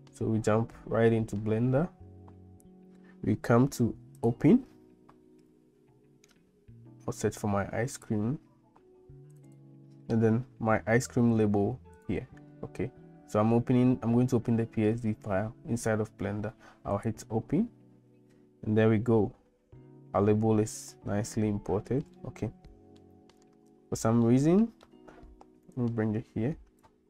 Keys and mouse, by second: 22.3 shift+middle click, 22.7 shift+middle click, 24.4 shift+middle click, 25.9 click.